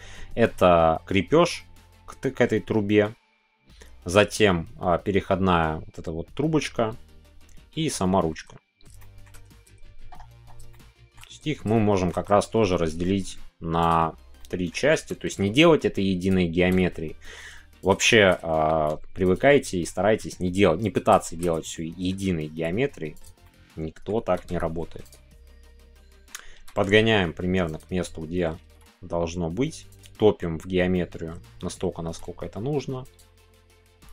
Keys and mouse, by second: 8.9 shift+middle click, 10.7 shift+middle click, 11.7-17.9 shift+middle drag, 17.9 click, 18.1-19.3 shift+middle drag, 19.5 middle click, 20.9 click, 21.2 middle click, 21.5 middle click, 22.5 s, 23.1 click, 23.4 middle click, 24.2 g, 25.2-26.2 middle drag, 27.7 click, 28.0 middle click, 29.9 click, 30.1 middle click, 30.9 middle click, 33.0 click, 33.3-34.1 middle drag.